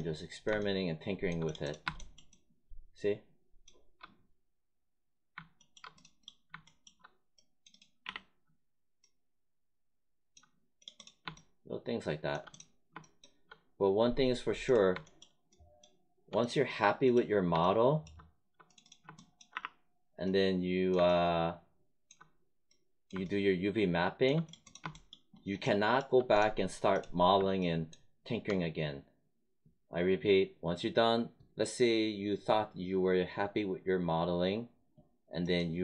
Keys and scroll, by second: 8.0 w, 19.4 r.